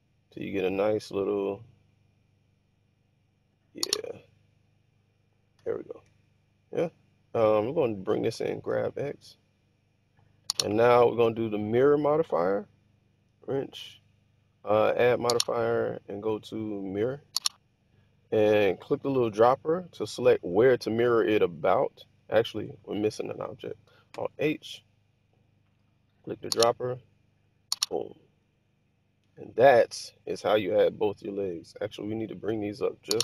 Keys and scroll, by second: 5.6 1, 8.1 g, 8.6 x, 22.3 Escape, 24.0 alt+h.